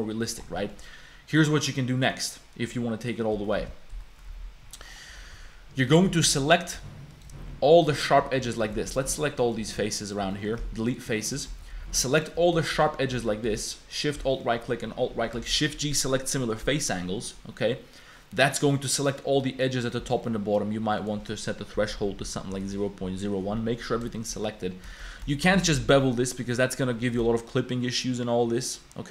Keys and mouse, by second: 0.6 click, 1.3-2.3 drag, 3.1 click, 3.4 shift+click, 3.9 KP_Decimal, 4.3 Tab, 4.7 click, 5.3 3, 5.9 shift+click, 6.2 2, 6.4 click, 7.1 alt+click, 7.4 1, 7.7 alt+click, 9.0 shift+middle click, 9.4 middle click, 9.7 3, 10.0 alt+click, 10.3 click, 10.6 x, 11.1 click, 11.4 shift+click, 11.6 2, 12.1 alt+click, 12.1 1, 12.6 shift+click, 13.1 2, 13.9 alt+shift+click, 14.3 middle click, 15.5 shift+g, 17.3-18.3 middle drag, 18.3 click, 19.1 click, 20.1 click, 21.3-22.5 drag, 24.2 shift+click, 24.9 shift+click, 25.3 shift+click, 25.7 ctrl+b, 26.2 middle click, 26.7 click.